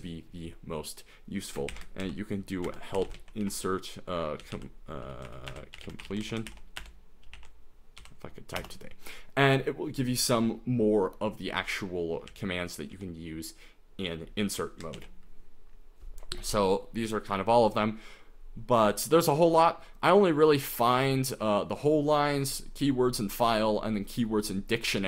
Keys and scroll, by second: 1.6-8.2 typing, 8.6 Return, 12.3-12.9 typing, 15.0 ctrl+d.